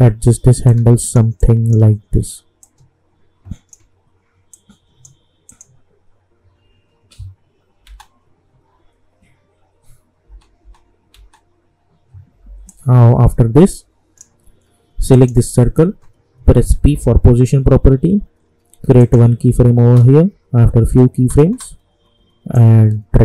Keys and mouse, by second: 1.0-2.7 shift+drag, 2.9 shift+click, 4.5 click, 7.9 space, 10.2 space, 12.6-15.1 drag, 16.8 p, 19.0 click, 19.7 space, 22.5-23.2 drag.